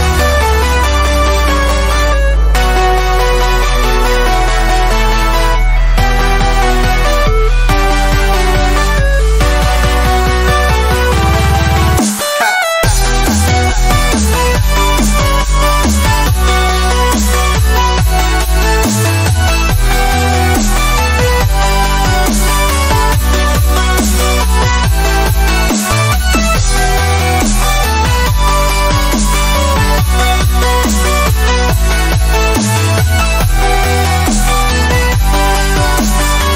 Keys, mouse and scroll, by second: 14.2 click, 15.4 click, 18.4 b, 33.5 click.